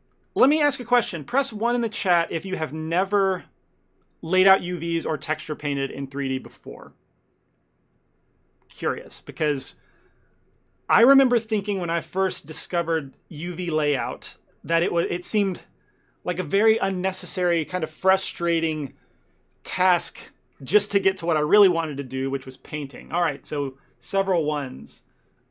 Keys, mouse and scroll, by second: 14.5 middle click, 14.8 ctrl+middle click.